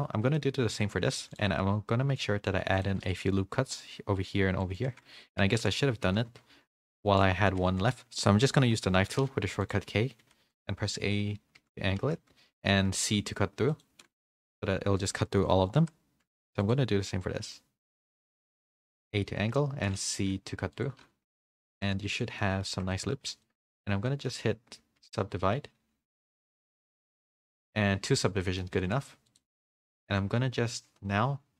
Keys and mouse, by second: 0.3 middle click, 0.7 Tab, 1.1 ctrl+r, 2.9 ctrl+r, 5.1 ctrl+z, 5.5 ctrl+z, 6.3-8.7 typing, 15.7 k, 22.0 z, 22.3 middle drag, 22.7 Tab, 22.9 middle click, 23.4 shift+middle click, 24.1 middle click, 25.4 ctrl+1, 26.2 ctrl+2, 27.8 a, 28.0 a, 28.1-28.5 middle drag, 28.5 click, 28.7 a, 28.8 a.